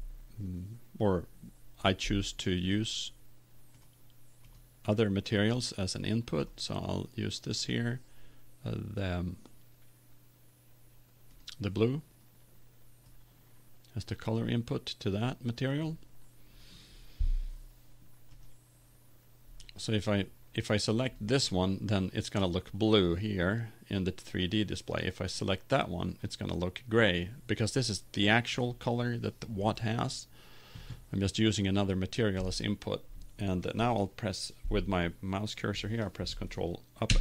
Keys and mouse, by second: 19.1 right click, 19.3 click, 21.3 right click, 22.1 click, 25.9 right click, 28.1-29.4 middle drag, 32.0-33.3 middle drag, 33.8-37.0 middle drag.